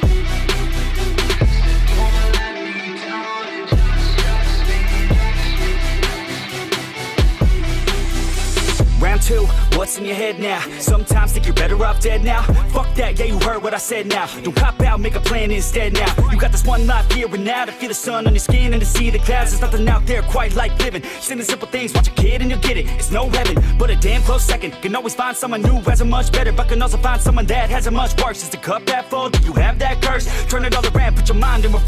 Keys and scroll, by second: 5.2 Escape, 9.1 Escape, 9.2 Escape, 11.7 Escape, 22.9-25.9 typing, 27.3-28.1 typing.